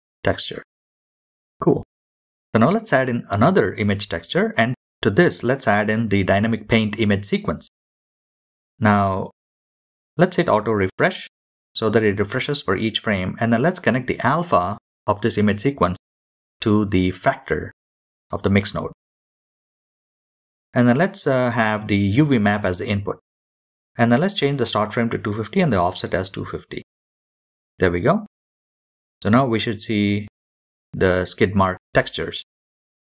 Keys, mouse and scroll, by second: 2.0-7.1 drag, 7.1 middle click, 7.4 scroll up 4, 7.7-8.9 middle drag, 8.9-9.4 drag, 9.7-10.5 scroll down 2, 10.0-10.5 middle drag, 10.5-11.6 drag, 11.9-13.4 scroll down 7, 12.2 middle click, 13.0-14.3 middle drag, 15.0-15.8 drag, 15.9 middle click, 16.3-17.5 drag, 17.5 middle click, 18.2-18.6 scroll up 2, 19.2 scroll up 3, 19.5-20.6 middle drag, 20.6-24.0 drag, 24.6 middle click, 25.0 scroll down 4, 25.2-25.8 middle drag, 25.8-26.4 drag, 26.4 KP_7, 26.8 scroll down 2, 27.7-30.1 drag, 28.7 KP_0, 30.1-31.7 shift+middle drag, 31.7-33.0 drag.